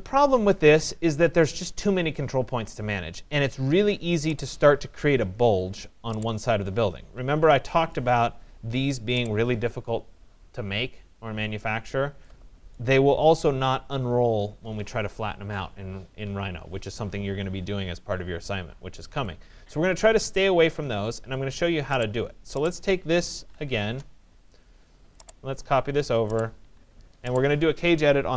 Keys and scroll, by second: 6.6 Escape, 23.5 Return, 26.7 Escape.